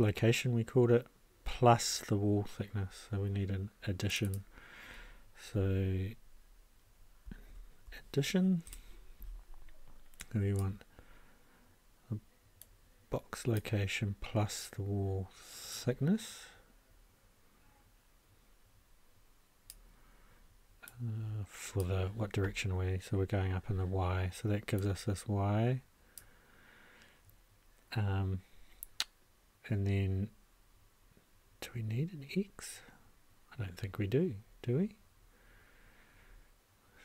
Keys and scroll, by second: 7.5 shift+=, 8.6 shift+Return, 9.8 Return.